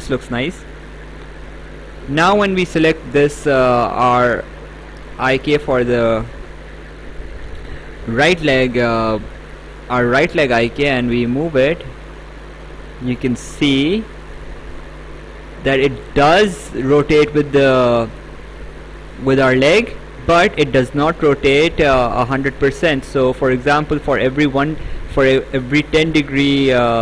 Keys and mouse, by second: 0.7 right click, 6.1 click, 9.0 right click, 11.3 click.